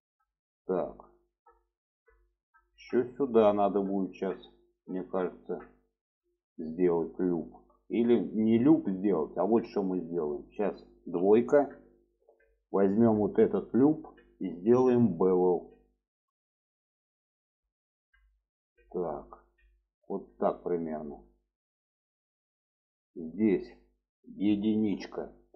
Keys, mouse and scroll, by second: 3.9-7.1 middle drag, 7.4 shift+middle click, 7.7 middle click, 8.9 middle click, 9.9 click, 11.2 2, 13.0 click, 13.7 middle click, 15.6 click, 16.8-20.5 drag, 20.5-22.7 middle drag, 23.0 shift+middle click, 24.8 1.